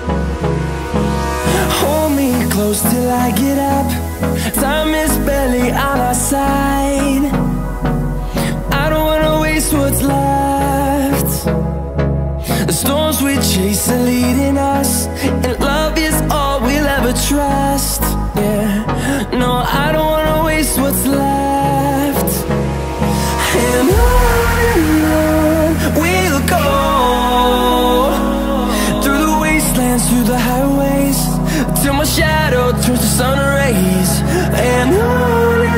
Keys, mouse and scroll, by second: 0.6 click, 0.9 right click, 2.2 click, 3.2-12.1 shift+drag, 16.7-26.7 drag, 28.7-33.8 alt+drag.